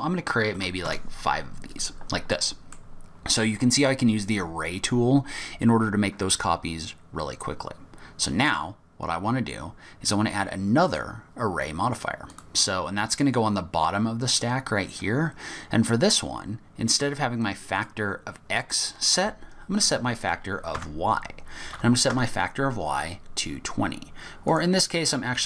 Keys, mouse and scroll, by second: 2.3 middle click, 3.4-3.7 scroll up 1, 6.8-7.1 scroll down 4, 7.1-7.9 scroll up 4, 8.2-8.7 scroll down 3, 8.7 scroll up 1, 10.8 click, 17.8 click, 24.4 click.